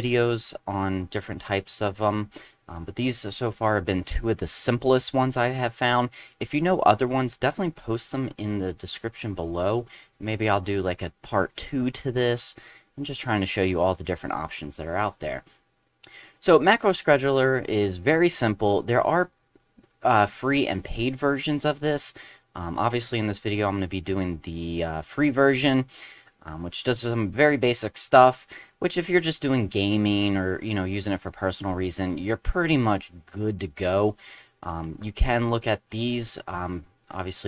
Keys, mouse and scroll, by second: 29.5 middle click, 29.5 scroll down 1, 31.5 middle click, 34.6 click.